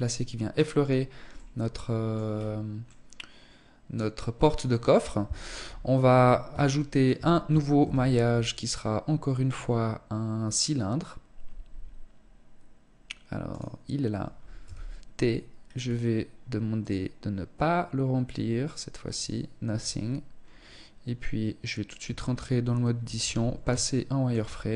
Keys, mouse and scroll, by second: 0.7 middle click, 1.7-2.3 scroll down 5, 2.3 middle click, 4.1 scroll down 2, 4.9 KP_1, 5.7 scroll down 1, 6.1 shift+middle click, 7.2 shift+a, 14.1 t, 15.1 scroll down 4, 16.2 click, 19.9-21.1 scroll up 2, 21.7 Tab, 22.6 z, 23.3 shift+middle click, 24.5 s.